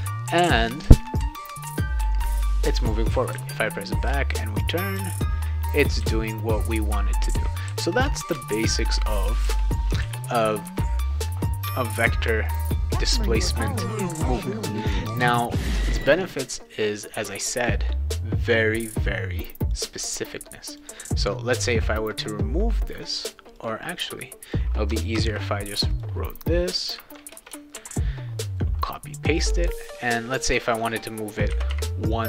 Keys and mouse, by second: 0.8 a, 1.2 d, 2.0 d, 3.3 s, 4.0 a, 4.9 a, 6.0 a, 6.9 a, 7.7 d, 8.3 a, 9.4 d, 10.0 w, 12.4 click, 19.7-20.8 drag, 21.7-22.9 drag, 23.2 click, 23.5 click, 24.0-24.5 drag, 25.1 ctrl+c, 25.9 click, 27.3 Return, 27.7 ctrl+v, 29.1 drag, 30.4 click, 31.5 /, 31.7 /.